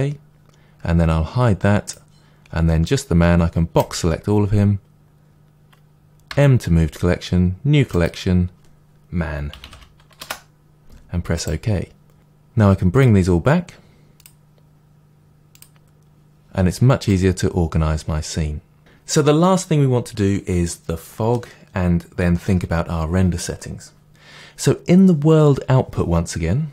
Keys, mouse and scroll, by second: 1.8 click, 2.8-3.3 drag, 6.2 m, 12.1-12.9 scroll up 1, 12.9 click, 16.6-17.0 scroll down 2, 17.0-26.7 middle drag.